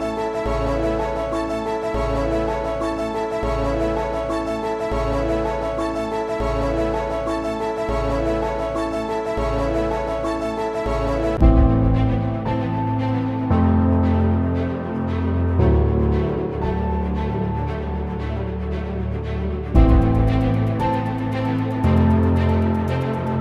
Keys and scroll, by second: 10.6 typing, 12.3 typing, 16.5-17.8 typing, 19.6 typing.